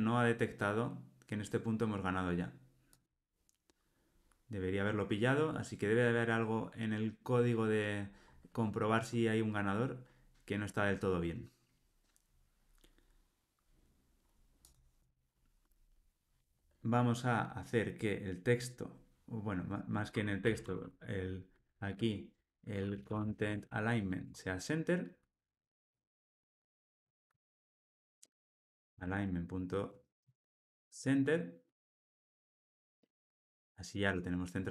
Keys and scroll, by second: 24.2 Tab, 29.9 Return.